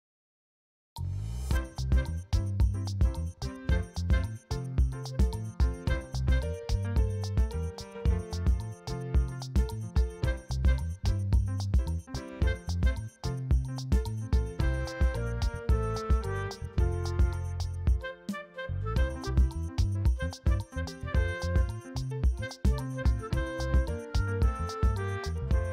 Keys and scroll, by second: 3.0 ctrl+j, 3.5 v, 3.9 ctrl+alt+z, 4.0 space, 4.7 ctrl+space, 4.8 ctrl+space, 5.7 l, 6.3 space, 10.2 b, 10.5 ctrl+space, 10.9 ctrl+space, 11.1 s, 11.5 ], 15.9 space, 16.5 space, 18.2-20.6 typing, 18.6 ctrl+d, 21.7 shift+j, 22.1 [, 22.6 space, 24.8 space, 25.4 space.